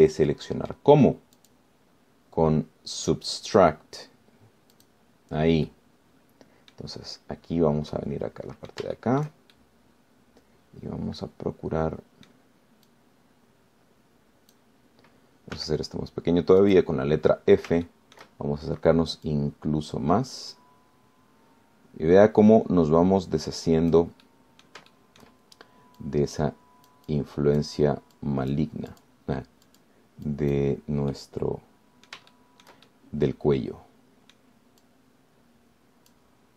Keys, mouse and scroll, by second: 0.6 scroll down 1, 1.0-2.1 middle drag, 2.6 click, 6.0 click, 6.9-8.2 drag, 8.3-9.0 scroll up 2, 9.2 click, 10.2 shift+click, 10.2 shift+middle click, 10.8-13.7 shift+middle drag, 14.1-16.0 drag, 16.8 f, 17.8 click, 18.4-18.8 scroll up 1, 19.1 shift+middle click, 20.0 scroll up 1, 20.5-25.4 drag, 25.4 middle click, 26.1 shift+middle click, 27.2-29.0 drag, 29.4 click, 30.2 click, 30.9 click, 31.5 click, 32.4-33.5 middle drag, 33.6 shift+middle click, 34.4-35.8 shift+middle drag, 36.0-36.5 drag.